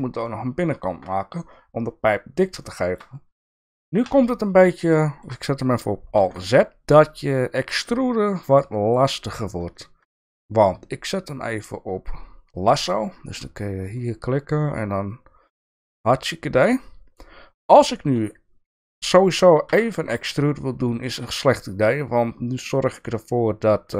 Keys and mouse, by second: 0.3-1.4 middle drag, 2.6 shift+middle click, 4.1 KP_3, 5.0 shift+middle click, 6.2 alt+z, 11.3-13.0 drag, 14.1-15.8 drag, 19.7 e.